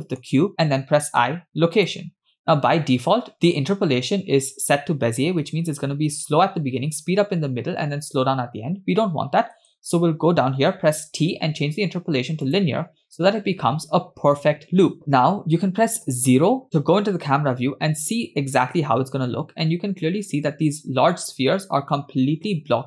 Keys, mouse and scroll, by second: 1.2 i, 5.6 space, 9.6 space, 11.0 t, 13.1 space, 16.0 KP_0, 17.3 space, 22.5 space.